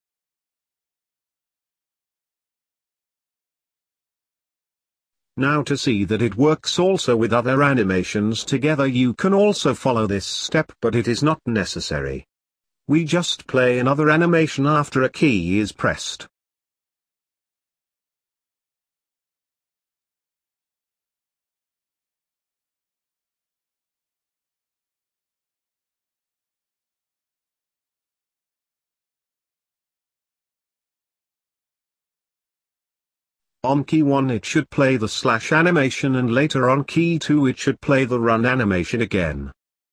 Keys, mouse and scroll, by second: 0.0 click, 5.0-5.5 scroll down 3, 5.5-7.3 middle drag, 7.3 click, 12.0-39.9 drag.